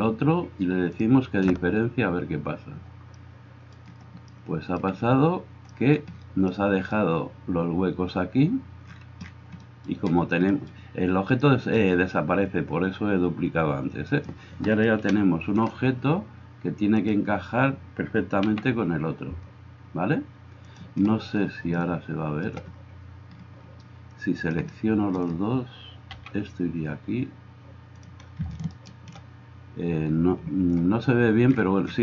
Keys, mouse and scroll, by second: 4.4-17.5 drag, 14.1 middle click, 14.1 right click, 15.1 KP_1, 17.5-28.7 middle drag, 18.5 g, 26.2 g, 28.7 click, 28.9-32.0 middle drag.